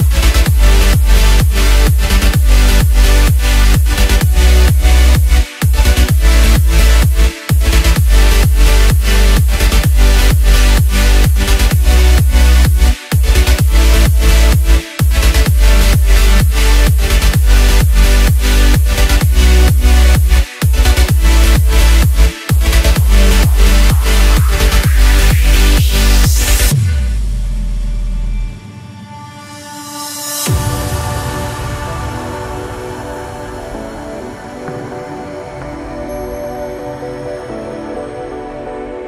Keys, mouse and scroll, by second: 0.8-3.6 drag, 3.9-4.4 scroll down 4, 4.8-5.8 drag, 6.1-7.7 middle drag, 7.7 drag, 8.4 click, 9.7-10.2 drag, 10.2-12.3 middle drag, 12.3 scroll up 2, 13.7-19.2 drag, 19.2 scroll down 3, 19.4-22.5 middle drag, 24.7 ctrl+KP_7, 25.4 scroll up 1, 26.7 Tab, 27.9 click, 28.5-29.7 scroll down 1, 29.7 shift+s, 31.5 Tab, 32.4 KP_1, 33.8-36.4 drag, 36.4 s.